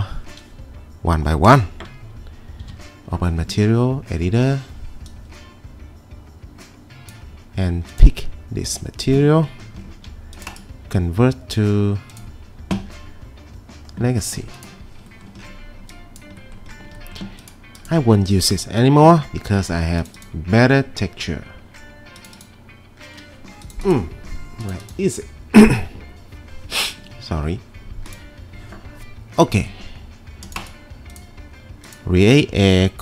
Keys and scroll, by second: 2.6 m, 18.5 Delete.